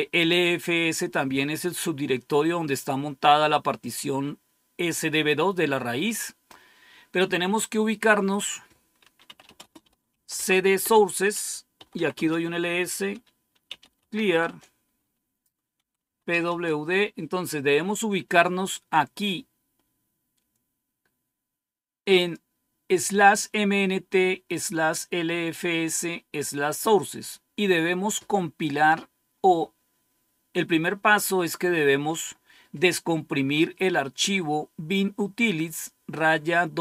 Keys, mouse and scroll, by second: 5.9 click, 8.2 click, 8.9-12.1 typing, 10.7 Return, 13.3-16.7 typing, 20.4-22.4 drag.